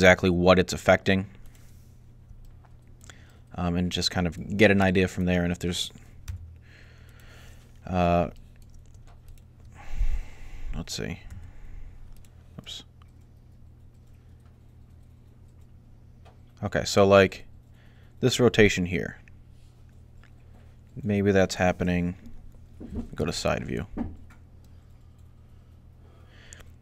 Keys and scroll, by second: 6.1 g, 11.1-11.9 typing, 23.0 3.